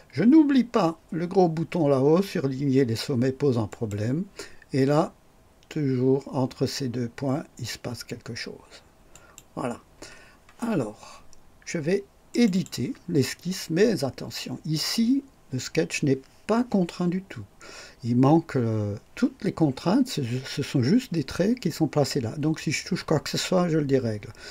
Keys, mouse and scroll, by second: 3.6 click, 9.1 click, 12.2 click.